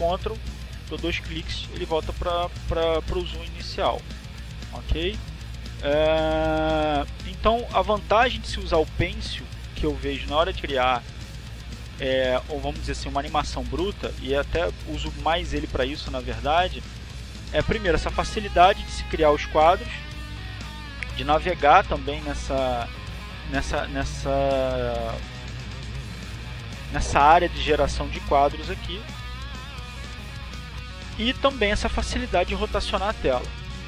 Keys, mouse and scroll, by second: 2.4 alt+click, 6.7 ctrl+click, 10.0 ctrl+click, 12.2-13.7 drag, 13.9 click, 23.9 click, 26.3-27.7 drag, 28.2-29.2 drag, 29.2 click, 32.0 click, 33.4-33.8 drag.